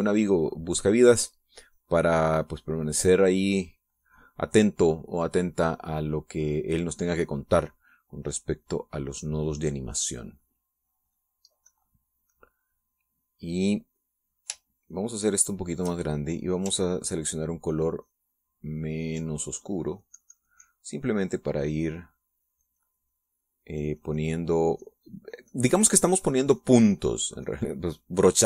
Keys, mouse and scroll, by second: 2.1-5.4 drag, 8.0 middle click, 8.8-10.1 middle drag, 12.6-15.3 drag, 15.8-16.9 shift+drag, 18.9 ctrl+click, 19.6 ctrl+click, 20.5-27.4 ctrl+drag, 27.5 ctrl+click, 28.2-28.4 ctrl+drag.